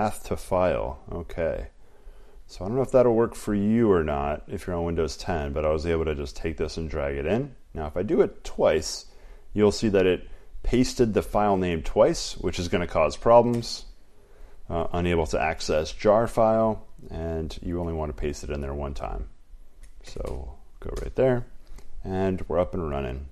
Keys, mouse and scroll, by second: 0.0-20.2 typing, 2.0 click, 4.0 click, 9.0 click, 11.0 click, 13.7 Return, 21.1 Return.